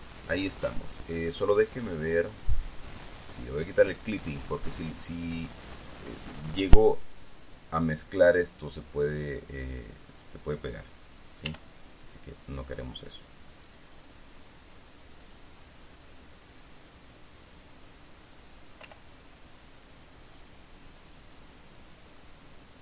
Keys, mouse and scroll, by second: 0.8 click, 3.0 click, 4.1 click, 7.3-11.0 drag, 12.0 r, 15.8 click, 17.0-18.6 drag, 18.6 middle click, 19.4 r, 20.9 click, 21.9-22.8 drag.